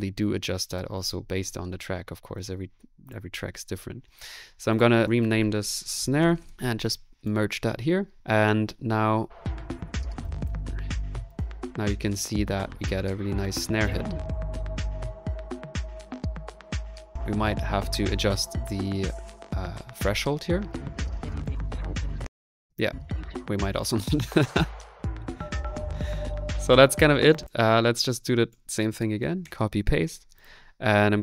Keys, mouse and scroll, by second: 9.0 space, 9.0 middle click, 10.2 click, 11.3 click, 13.9 click, 20.9 middle click, 21.2 click, 21.6 middle click, 22.0 space, 27.2-29.4 typing.